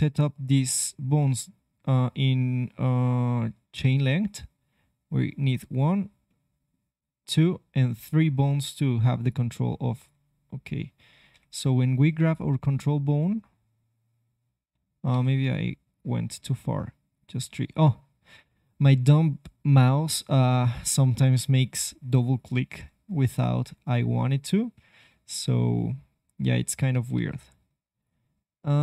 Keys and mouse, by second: 6.2-8.0 middle drag, 11.3 KP_3, 12.5 g, 12.6-14.2 drag, 15.8-19.1 drag, 22.3-24.3 drag, 23.2 g, 27.9-28.8 drag.